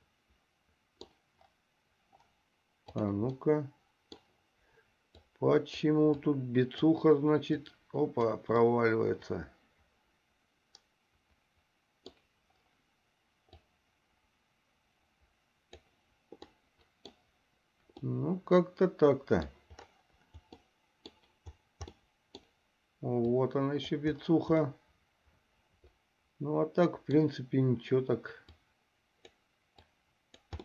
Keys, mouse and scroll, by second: 0.0-1.4 middle drag, 3.3 click, 3.6 middle click, 5.4 click, 6.4 click, 7.9 click, 8.9-12.3 middle drag, 13.8-16.1 drag, 16.8 middle click, 18.2-19.7 middle drag, 20.9 middle click, 23.4 click, 25.0-27.4 middle drag, 28.7 click, 30.2 click.